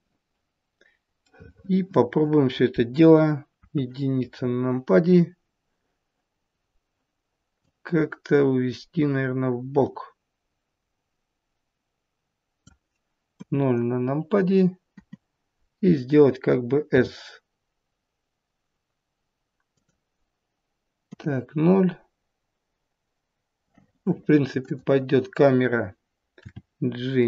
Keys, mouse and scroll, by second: 1.3 middle click, 2.1 middle click, 3.6 KP_1, 4.4-5.0 scroll up 4, 6.5-6.8 scroll up 2, 7.6 click, 13.3 KP_0, 14.9 KP_0, 16.9 s, 21.0 KP_0, 24.6 click, 26.4 g.